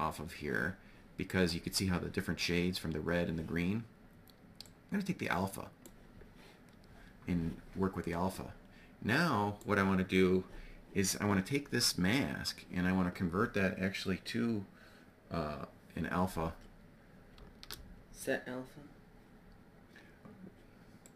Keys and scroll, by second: 16.9 shift+a.